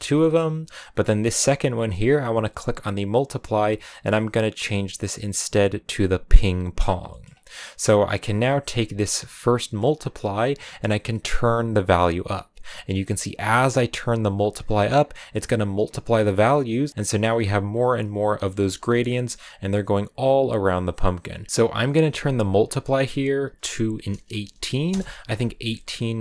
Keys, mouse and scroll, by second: 6.9 shift+middle click, 7.1-8.3 scroll up 1, 8.4-13.5 drag, 15.0-16.7 middle drag, 16.7 click, 16.9-19.2 middle drag, 19.2-21.4 drag, 21.4 a, 24.7 click, 25.5-26.2 middle drag.